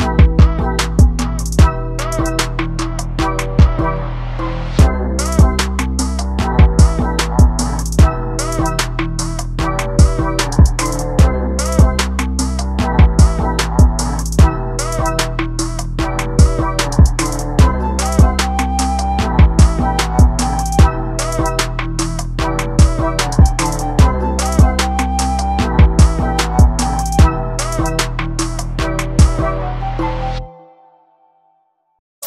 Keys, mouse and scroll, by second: 2.2 s, 3.7 click, 4.8 s, 7.9 ctrl+space, 8.6-8.9 scroll down 2, 8.9-14.2 shift+middle drag, 9.5-10.1 scroll up 1, 10.1-11.5 scroll up 1, 11.5-12.1 scroll up 1, 12.1-13.0 scroll up 1, 13.0-14.2 scroll up 1, 22.8 ctrl+space, 23.8 alt+a, 25.1 click, 27.6 click, 29.1 ctrl+space.